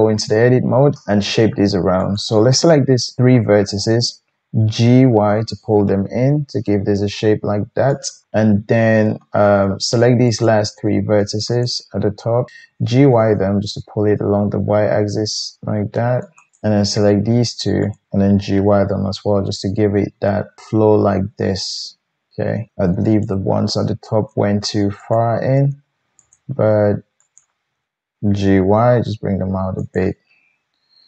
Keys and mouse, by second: 2.2-10.2 drag, 4.9 g, 10.2 middle click, 10.5-11.5 drag, 11.5-12.5 shift+middle drag, 12.5-15.6 drag, 12.6 g, 15.6 right click, 16.5 click, 17.9 shift+click, 18.3 g, 23.0 shift+click, 25.0 click, 26.2 shift+click, 27.2 shift+click, 27.7-28.3 drag, 28.3 right click, 28.3 g, 28.4-31.0 drag.